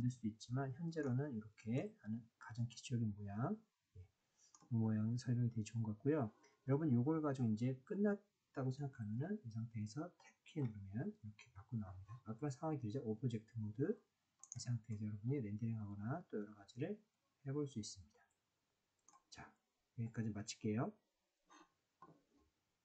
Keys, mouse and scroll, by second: 1.8-4.5 middle drag, 10.6 Tab, 14.4 click, 14.9-19.0 middle drag.